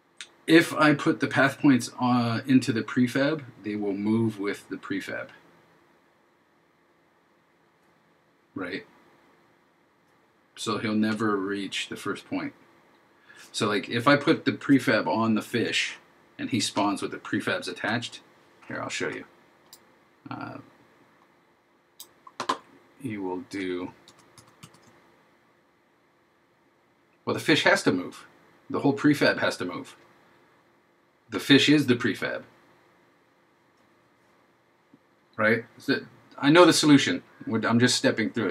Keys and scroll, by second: 24.1 super+d.